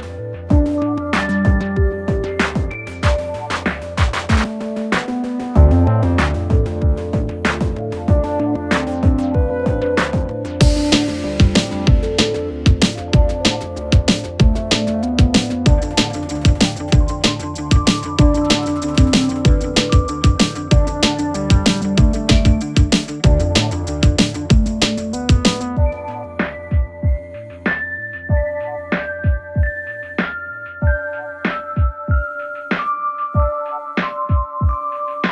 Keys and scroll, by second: 0.6 5, 5.3 2, 6.3 ctrl+d, 6.5 Escape, 8.4 ctrl+F1, 14.7 Escape, 18.8 Escape, 24.9 Escape.